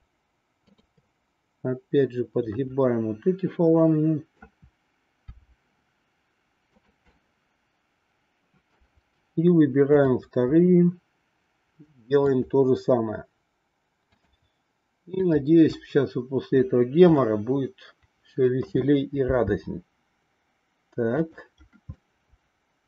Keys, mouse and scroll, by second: 0.8-2.0 shift+drag, 2.6-4.5 middle drag, 5.3 r, 7.2-8.9 middle drag, 12.3-13.6 shift+drag, 14.1-15.2 shift+drag, 17.1-18.6 middle drag, 19.2 r, 22.0-22.8 middle drag.